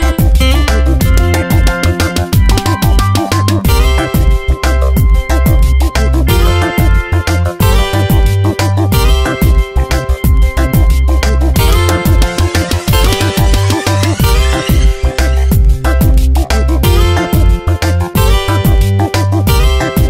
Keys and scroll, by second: 0.2 Left, 1.0 Up, 7.6 ctrl+z, 11.1 ctrl+alt+l.